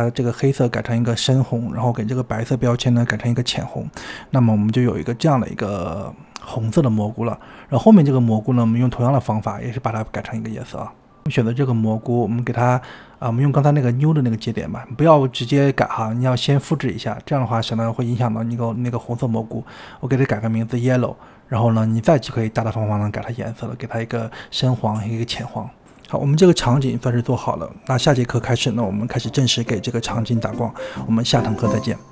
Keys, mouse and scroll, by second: 1.6-4.0 drag, 4.3-5.4 middle drag, 4.5 scroll up 3, 4.8-5.4 scroll down 1, 5.4-6.7 drag, 10.9 click, 11.5 click, 12.6 click, 15.0-19.5 drag, 21.5 shift+middle click, 23.1-24.8 drag, 26.4-26.8 drag, 27.7 middle click, 27.8 scroll up 6, 28.1 middle click, 28.4-28.8 scroll down 9, 28.5 shift+middle click, 28.6 click, 28.8 middle click, 28.9 scroll up 3, 29.0 click, 29.3-31.2 typing, 29.9 click, 30.3 click, 30.4 shift+middle click, 30.5 click, 30.6 scroll down 28, 30.7 middle click, 30.8 click.